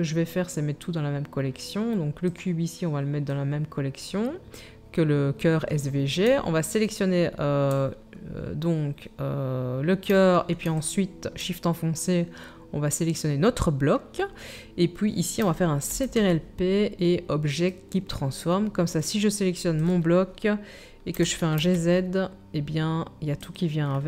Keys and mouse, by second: 3.3-6.2 drag, 6.7 shift+middle click, 6.8-10.7 shift+drag, 10.7 shift+middle click, 10.9-19.7 shift+drag, 15.9 ctrl+p, 19.7 middle click, 19.9-24.0 drag, 21.1 g.